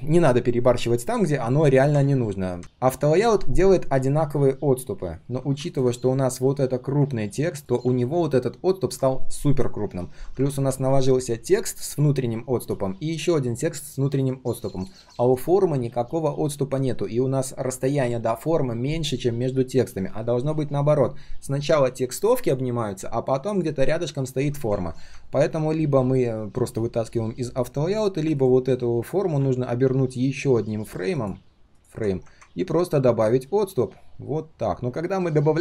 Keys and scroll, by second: 2.6 ctrl+z, 29.2 ctrl+g.